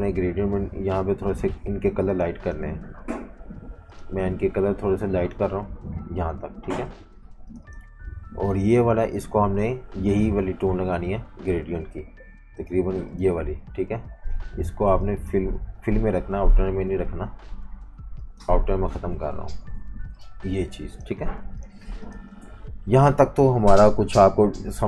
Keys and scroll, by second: 11.9 i, 21.5 v, 21.8 space.